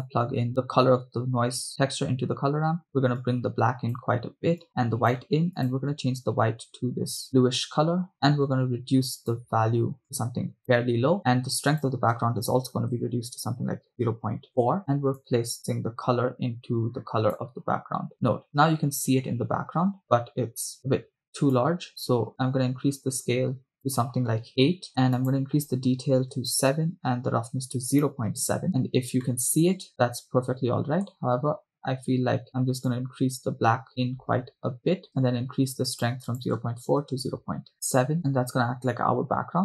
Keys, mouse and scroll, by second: 0.5-2.0 drag, 3.2-4.1 drag, 4.7 click, 5.7 click, 11.7-14.7 drag, 15.2-17.8 drag, 21.5-23.8 drag, 23.9-24.9 drag, 25.2-26.9 drag, 28.1 click, 29.3 middle click, 29.9 scroll up 1, 30.1-31.5 shift+middle drag, 32.9-35.3 drag, 35.9-37.7 drag, 38.2-38.7 scroll down 1.